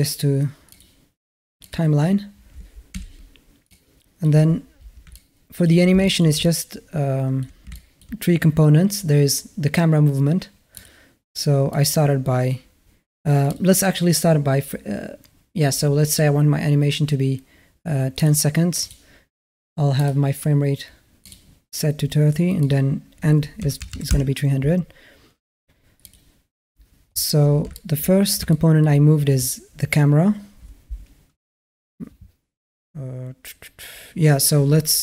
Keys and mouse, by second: 1.5 click, 2.7 n, 3.5 click, 4.9-5.5 middle drag, 5.8 shift+a, 5.9 middle drag, 6.2-7.2 alt+middle drag, 7.5 shift+a, 7.5 shift+middle drag, 7.8 shift+a, 11.6 click, 13.3 click, 18.0 click, 18.6 click, 20.0-21.1 drag, 22.4-24.0 drag, 23.7 KP_0, 25.9 click, 27.5 shift+middle drag, 27.8 shift+click, 27.8 shift+a, 28.3-28.6 shift+middle drag, 28.6 shift+a.